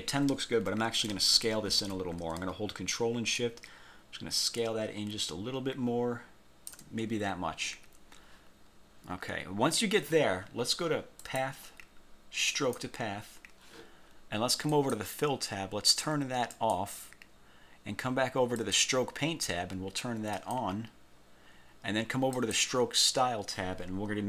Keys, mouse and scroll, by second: 3.5 ctrl+shift+click, 11.4 click, 12.6 click, 14.8 click, 16.6 click, 18.7 click, 20.5 click, 22.4 click.